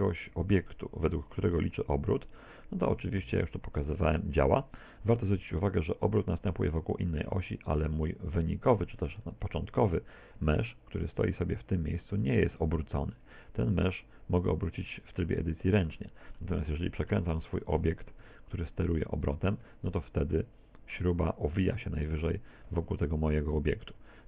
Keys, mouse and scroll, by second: 2.9 right click, 3.3 r, 7.8 click, 8.4 middle click, 9.5 shift+middle click, 10.4 Tab, 11.0 right click, 11.4 Tab, 11.7-12.7 scroll up 7, 13.6 r, 16.0 middle click, 16.6 middle click, 17.4 shift+middle click, 18.2 Tab, 18.5 scroll down 3, 19.2 right click, 19.7 r, 23.8 ctrl+z, 24.0 ctrl+z.